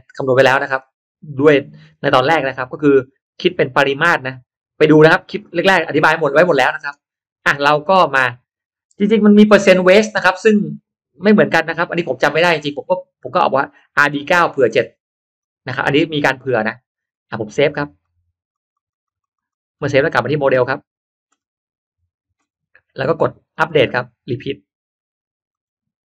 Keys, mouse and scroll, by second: 0.8 click, 5.5 click, 13.1 click, 15.3 click, 17.9 click, 18.5 click, 18.7 click, 19.3 click, 20.4 click, 23.9 click, 25.4 click.